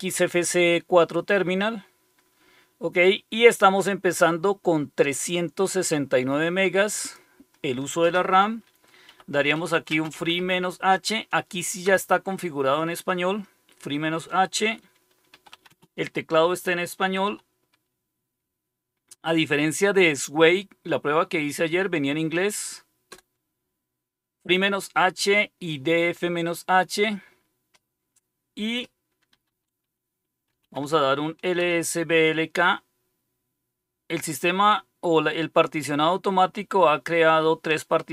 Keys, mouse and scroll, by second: 3.8-5.2 drag, 6.9 click, 8.8-10.8 typing, 11.8 Return, 15.0-17.6 typing, 23.0 Return, 29.0-31.2 typing, 31.5 Return.